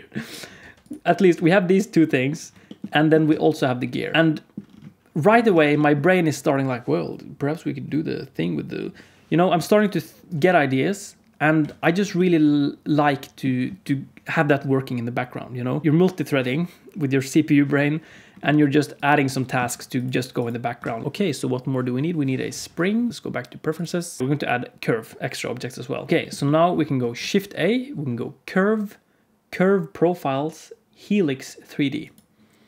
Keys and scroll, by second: 0.5 alt+a, 3.2 alt+a, 5.5 alt+a, 11.6 alt+a, 19.5 alt+a, 20.7 alt+a, 26.1 Tab, 26.1 x, 27.1 shift+a.